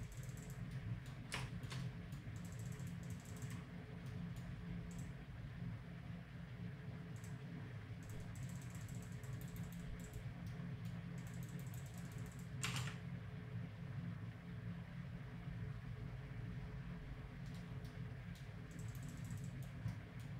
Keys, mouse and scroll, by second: 8.3-14.1 drag, 10.5-12.6 middle drag, 12.6 r, 17.9 middle click, 18.7-20.1 drag, 20.1 middle click.